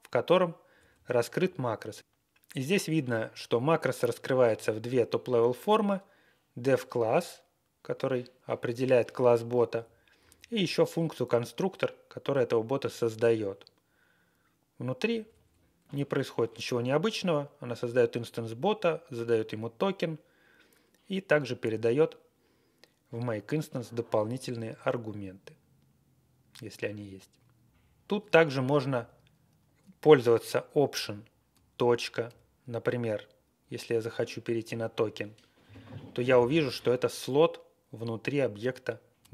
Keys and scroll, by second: 0.7 Down, 0.9 Down, 1.3 Up, 1.7 Right, 8.0 Right, 8.2 Right, 8.2 Right, 9.7 Down, 10.2 Left, 10.3 Left, 10.5 Left, 10.6 Left, 15.0 Down, 15.2 Down, 15.4 Down, 15.8 Down, 15.8 Up, 16.5 Right, 17.7 Right, 27.7 Up, 27.7 Up, 28.9 Down, 31.9 Down, 34.6 alt+..